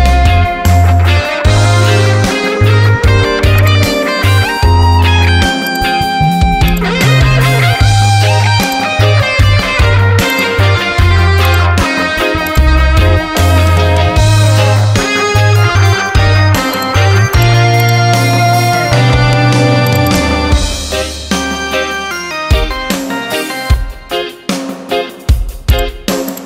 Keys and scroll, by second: 4.1 ctrl+a, 22.5 Return.